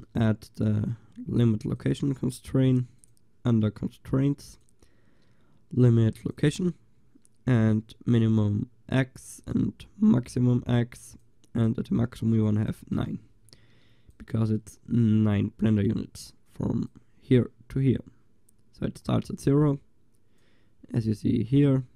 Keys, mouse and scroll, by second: 1.3 middle click, 1.8-6.4 drag, 6.4-7.6 middle drag, 7.6-13.2 drag, 13.2 middle click, 13.7 click, 14.2-21.9 drag.